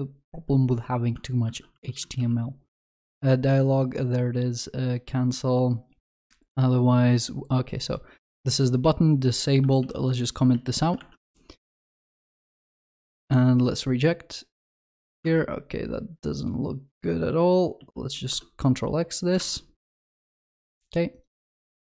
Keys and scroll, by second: 1.5 ctrl+f, 9.8 ctrl+/, 17.8 ctrl+x, 18.2 ctrl+s.